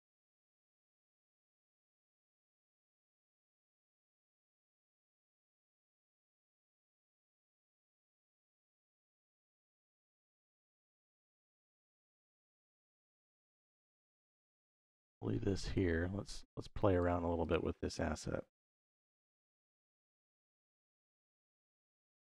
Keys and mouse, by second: 8.4 click, 10.2-11.7 drag, 12.5-13.6 drag, 14.6 click, 16.1 click, 17.2 click, 18.5 shift+d, 19.3 click, 19.7 middle click, 20.3 click, 21.3-21.9 drag.